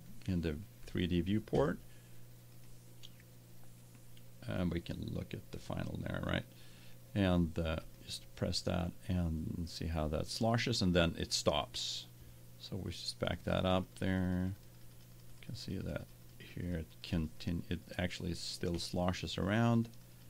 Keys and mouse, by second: 4.1 click, 4.4-6.2 drag, 9.4 right click.